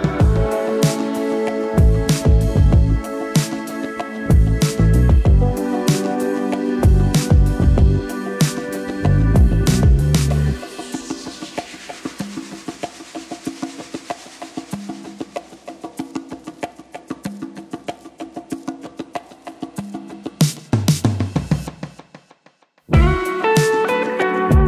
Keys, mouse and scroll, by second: 0.3 click, 4.2-4.9 typing, 6.4-11.1 drag, 20.6-23.5 typing.